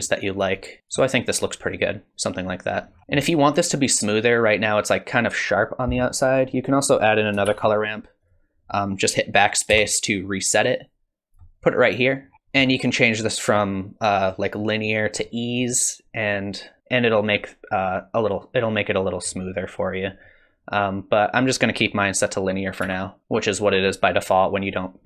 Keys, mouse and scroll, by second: 0.8 click, 2.9 scroll down 8, 3.0 middle click, 6.8 click, 7.5 shift+d, 9.7 BackSpace, 10.6 click, 12.3 scroll down 1, 12.3 middle click, 12.3 scroll up 6, 14.2 click, 18.6 click, 21.3 click, 22.9 ctrl+x.